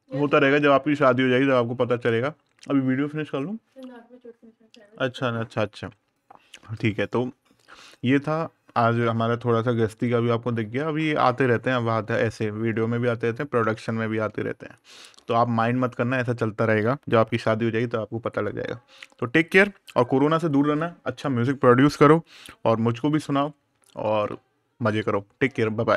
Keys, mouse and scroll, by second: 0.2-2.2 scroll down 1, 7.0-7.5 scroll down 1, 7.6-10.7 scroll up 1, 13.0-13.5 scroll down 1, 14.0 scroll up 1.